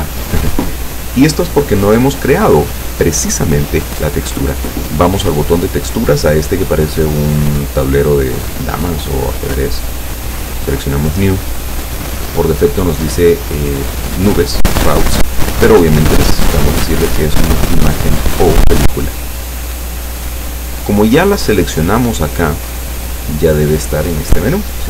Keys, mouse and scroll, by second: 1.5 click, 10.3 click, 15.5 click, 19.1 click, 23.7 click.